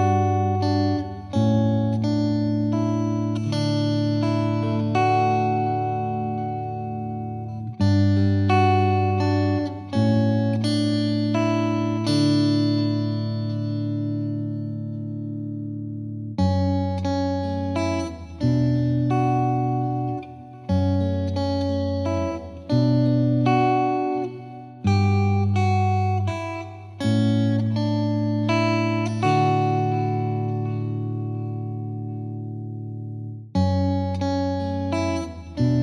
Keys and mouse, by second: 0.2 shift+click, 0.5 shift+click, 1.4 click, 1.9 click, 2.1 shift+click, 2.8 click, 3.1 click, 3.8 click, 4.3 click, 5.2 click, 6.0 click, 8.2 click, 8.3 F3, 9.5 F2, 9.8 click, 10.5 click, 11.7 click, 12.1 click, 13.7 click, 14.5 shift+click, 14.7 click, 15.6 click, 15.7 click, 16.3 click, 17.1 click, 18.0 click, 18.9 click, 19.1 click, 19.3 shift+click, 19.5 shift+click, 19.6 click, 19.8 click, 21.0 right click, 21.4 click, 21.9 shift+click, 22.3 right click, 22.9 click, 23.6 click, 24.6 click, 25.7 click, 25.7 click, 26.7 click, 26.7 click, 27.1 click, 27.8 click, 28.4 click, 28.9 right click, 29.9 click, 30.1 click, 30.8 F2, 31.0 click, 31.9 click, 32.8 click, 33.5 click, 33.7 Escape, 33.8 F3, 34.1 F3, 34.6 click, 35.1 click.